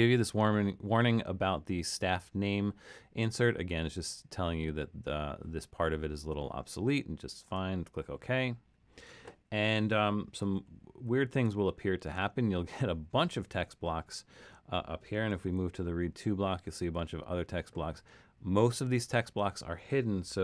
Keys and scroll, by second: 10.6 super+=, 11.1 super+=, 15.5 alt+super+..